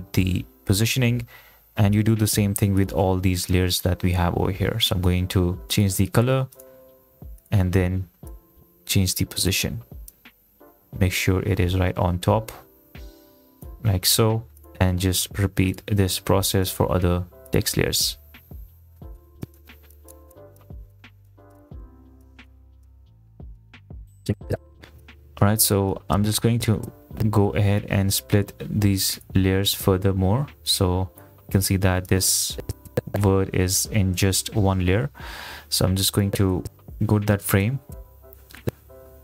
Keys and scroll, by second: 21.9 shift+e, 24.3 space.